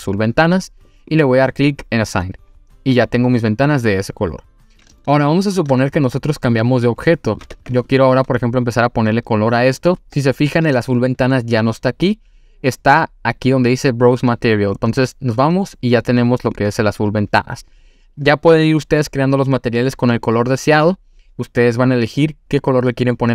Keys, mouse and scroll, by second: 2.0 click, 3.3-3.8 scroll down 1, 4.3 scroll down 5, 5.0 shift+middle click, 6.3-6.8 scroll down 2, 6.7 click, 7.3 click, 7.5 Tab, 7.7 click, 14.8-16.7 drag.